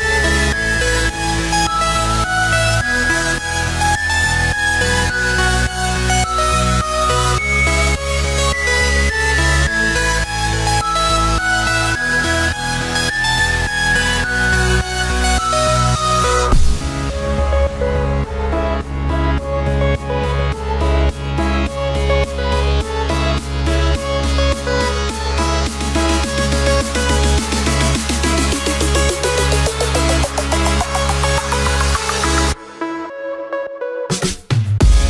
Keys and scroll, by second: 0.0-4.4 typing, 4.6 ctrl+space, 5.7-7.6 typing, 8.9-11.0 typing, 11.6 ctrl+z, 12.3-27.5 typing, 28.5-33.1 typing, 32.3 ctrl+space.